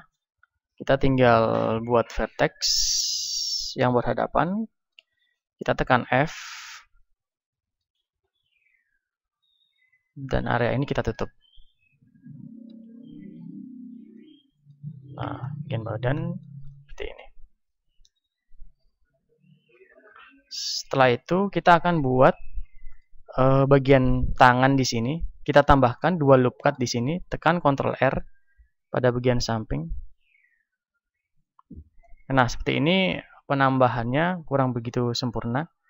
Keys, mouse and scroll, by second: 0.7 ctrl+Tab, 2.1-5.9 right drag, 2.7-5.9 drag, 5.9-9.9 middle drag, 5.9 f, 8.9 ctrl+Tab, 10.3-13.7 right drag, 12.7 f, 13.0 click, 13.7 middle click, 13.7 a, 14.7 Tab, 15.6 Tab, 18.7-20.3 middle drag, 18.7 KP_1, 21.3-35.8 middle drag, 27.5 ctrl+r.